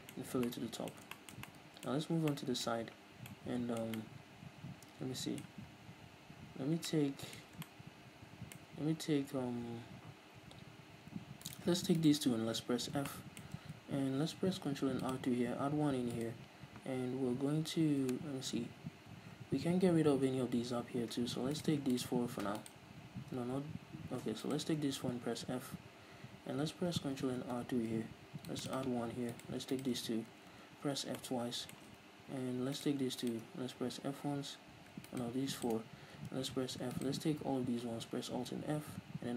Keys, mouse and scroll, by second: 0.2 Tab, 2.0-2.3 scroll up 2, 10.8-11.4 scroll up 2, 11.4-12.7 right drag, 12.7 f, 13.1-15.1 shift+middle drag, 15.1 click, 16.1-19.8 right drag, 21.5-25.2 right drag, 25.3 f, 27.4 ctrl+r, 28.7 click, 28.8 right click, 29.7 shift+right click, 30.4 f, 31.2-32.8 shift+middle drag, 32.8-33.8 right drag, 33.8 f, 35.1-36.3 shift+right drag, 36.3 f, 37.0 alt+right click, 38.2 alt+f.